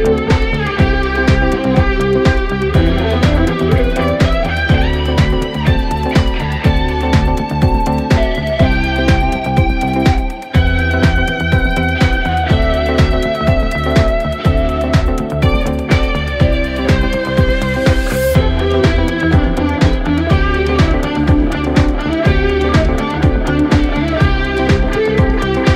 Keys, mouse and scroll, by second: 1.6 space, 3.0 space, 3.6-4.7 drag, 4.7-5.6 scroll down 1, 5.6-6.1 drag, 6.1 scroll down 1, 6.1 scroll up 1, 6.2 scroll down 1, 6.4 middle drag, 6.7 drag, 6.8 scroll up 2, 7.3-8.1 middle drag, 8.1 KP_7, 9.2 click, 9.8-11.7 drag, 12.8 middle click, 13.4 click, 13.7-14.7 middle drag, 14.7 KP_7, 15.5 KP_7, 16.8 click, 17.5-19.0 middle drag, 19.0 KP_7, 19.8 g, 21.0-24.9 middle drag, 24.9 KP_0, 25.2 scroll up 2.